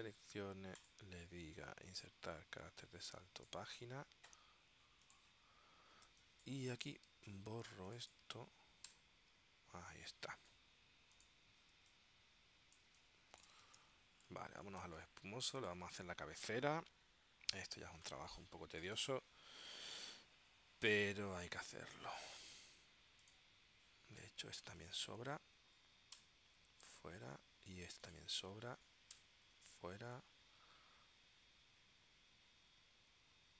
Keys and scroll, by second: 6.2 space, 9.0 BackSpace, 11.8 space, 15.0 space, 26.3 Delete, 29.2 Delete.